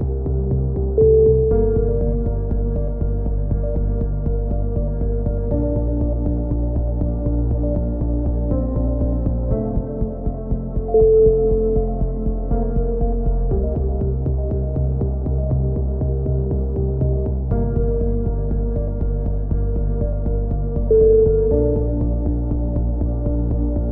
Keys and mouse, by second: 0.1 click, 1.0 alt+m, 1.0 right click, 1.6-3.5 right drag, 3.0 x, 3.7 z, 4.0 right click, 4.6 click, 4.9 KP_7, 5.5 z, 5.8-7.8 middle drag, 7.8 KP_3, 8.9-10.3 middle drag, 10.3 c, 11.3-12.4 drag, 13.0-14.4 drag, 15.7 click, 16.4-17.7 right drag, 17.4 alt+m, 18.0-19.1 right drag, 18.7 alt+m, 19.8 KP_3, 20.1 a, 20.1 c, 20.7 right click, 21.5 click, 23.6 a.